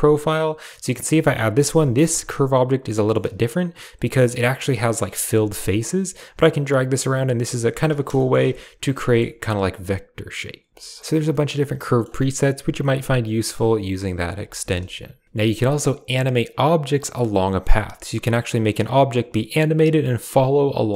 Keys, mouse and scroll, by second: 0.2 middle click, 1.6 KP_7, 2.8 shift+middle click, 5.0 g, 7.0 click, 7.1 g, 8.1 shift+click, 8.4 Tab, 9.0 shift+click, 10.6 shift+middle click, 11.2 middle click, 12.7 middle click, 13.6 Tab, 14.3 x.